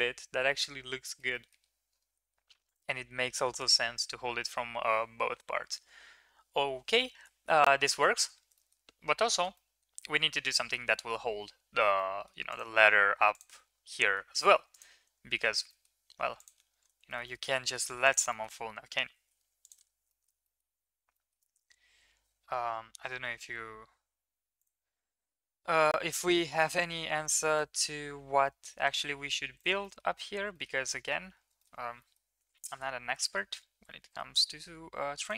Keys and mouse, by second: 0.5-1.2 middle drag, 1.3 middle drag, 7.1 shift+middle drag, 7.8 shift+middle click, 8.2 middle click, 8.5 shift+middle click, 9.3 shift+middle click, 9.6-10.7 middle drag, 11.9-12.2 middle drag, 13.3 click, 14.0 middle drag, 14.7 drag, 15.3 Tab, 15.7 middle click, 16.2 Tab, 16.5 Tab, 17.0 shift+middle click, 17.3 middle click, 18.3 middle click, 19.1 shift+s, 20.0 Tab, 20.1 middle click, 20.4 middle drag, 21.1 middle click, 21.5 shift+a, 25.8 s, 26.8 s, 27.7 s, 29.8 middle drag, 30.6 shift+middle drag, 32.0 middle click.